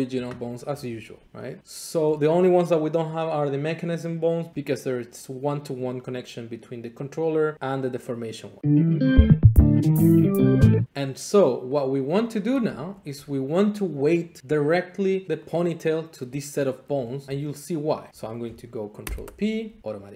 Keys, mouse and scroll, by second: 1.6-8.6 drag, 10.9-11.7 scroll, 11.7 click, 12.5 scroll, 12.7 Tab, 13.3 scroll, 15.5 click, 17.2 shift+click, 19.0 ctrl+p, 19.9 click.